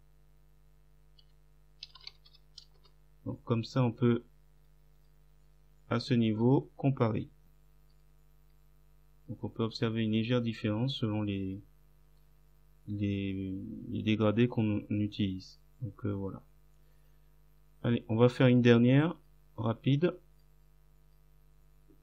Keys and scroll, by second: 1.2-2.9 typing.